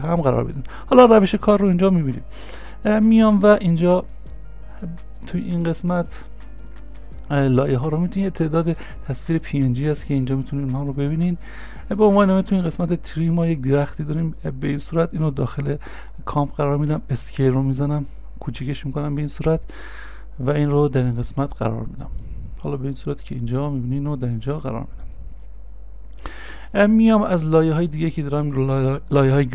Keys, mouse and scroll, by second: 6.7 l, 12.9-14.6 scroll down 1, 16.9 scroll down 1.